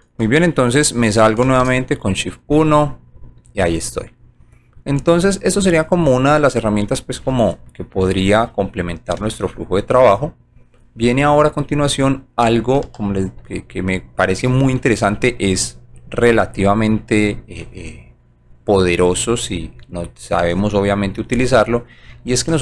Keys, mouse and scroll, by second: 2.4 shift+click, 2.5 1, 3.1 click, 3.5-4.7 alt+drag, 4.9 alt+right click, 5.4 alt+middle click, 6.3 alt+click, 6.8 alt+middle click, 9.2-10.8 alt+middle drag, 11.0 alt+right click, 11.6 alt+middle click, 12.9 alt+j, 13.5 alt+middle click, 14.1 alt+right click, 17.3 scroll up 1, 19.1 scroll up 1, 19.6 alt+right click.